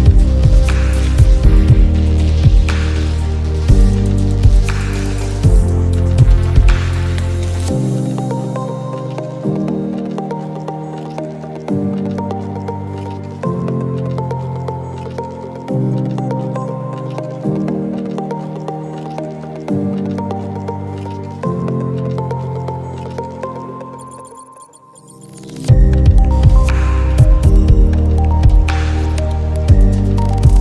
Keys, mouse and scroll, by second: 1.8-5.3 drag, 7.7-12.0 drag, 13.4 alt+click, 16.5 ctrl+z, 17.0 click, 21.8-27.4 drag.